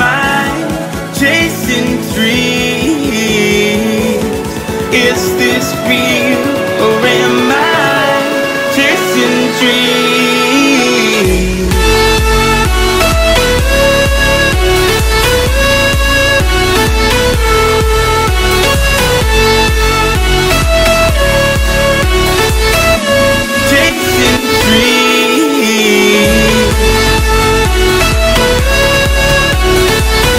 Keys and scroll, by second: 5.7 super+c, 21.2 super+v.